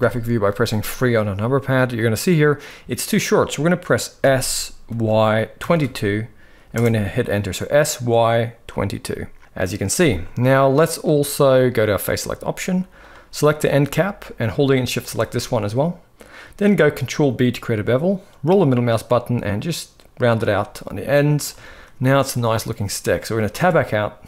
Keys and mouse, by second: 3.9 s, 9.2 middle drag, 10.3-10.7 middle drag, 10.9 shift+middle drag, 11.8 click, 13.4 middle click, 14.7 shift+click, 16.4 ctrl+b, 20.4 middle click, 21.3 shift+middle click, 22.0 middle click, 22.7 middle click, 23.2 Tab.